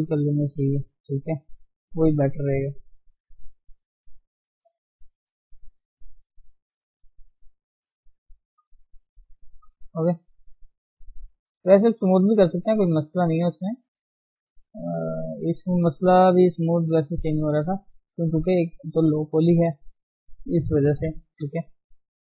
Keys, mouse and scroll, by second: 1.4 middle click, 1.6-2.8 middle drag, 2.8 scroll down 1, 3.0-4.6 middle drag, 4.6 click, 5.1 g, 6.0 click, 6.1 g, 7.0 click, 7.2 g, 8.0 click, 8.2 g, 9.3 click, 9.4 g, 10.6 click, 10.7 g, 11.3 click, 11.6 g, 12.7 middle click, 13.0 scroll down 1, 13.6 click, 14.1 g, 15.0-17.0 middle drag, 17.0-17.4 scroll up 1, 20.7 KP_1, 21.1-21.6 scroll up 1, 21.6 scroll down 3, 21.9 shift+middle click, 22.1-22.3 scroll up 1.